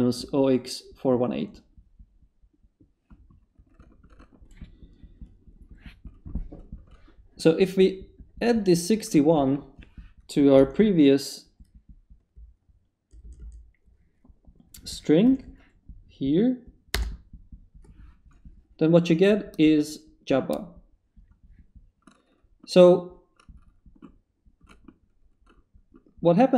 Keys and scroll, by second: 10.6 Up, 12.3 Left, 15.0-15.7 typing, 16.9 Return.